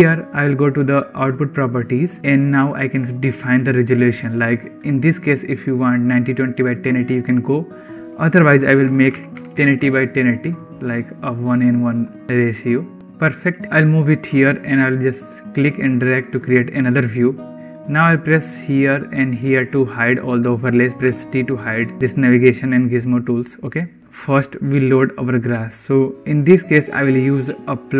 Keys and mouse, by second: 1.8 click, 8.1-10.5 drag, 10.9-14.3 shift+middle drag, 15.5-16.6 drag, 17.5 Home, 18.4 click, 19.3 click, 20.9 t.